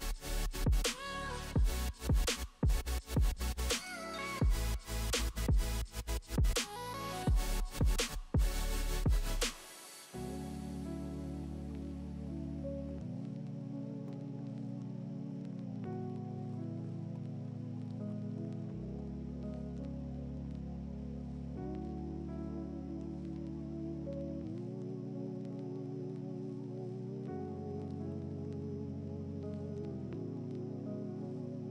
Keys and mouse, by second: 0.4 g, 2.1 middle click, 2.7-17.8 drag, 5.9 middle click, 5.9 right click, 8.3 middle click, 8.3 right click, 9.2 middle click, 9.2 right click, 14.2 middle click, 14.2 right click, 14.9 middle click, 14.9 right click, 17.8 middle click, 17.9-20.9 drag, 20.9 middle click, 21.0-31.7 drag, 28.9 middle click, 28.9 right click.